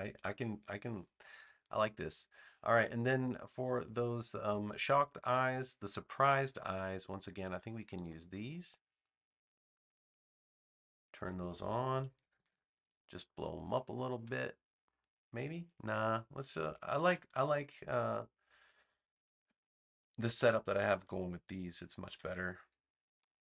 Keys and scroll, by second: 12.1 super+=, 13.1 space, 17.0 BackSpace, 22.0 super+c.